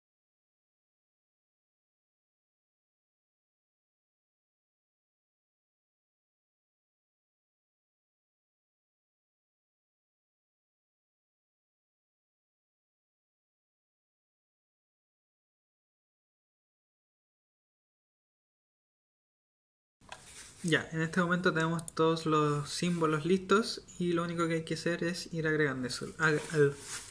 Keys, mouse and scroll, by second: 0.0-4.5 typing, 0.0 Tab, 0.1 Tab, 0.6 Tab, 4.3 Tab, 5.5-9.8 typing, 6.5 Tab, 7.7 Tab, 7.8 Tab, 8.0 Tab, 8.1 Tab, 10.1 Tab, 10.8 Tab, 10.8-15.2 typing, 10.9 Tab, 11.1 Tab, 16.7-19.4 typing, 17.9 Tab, 18.0 Tab, 18.7 Tab, 18.8 Tab, 19.1 Tab, 19.6 Tab.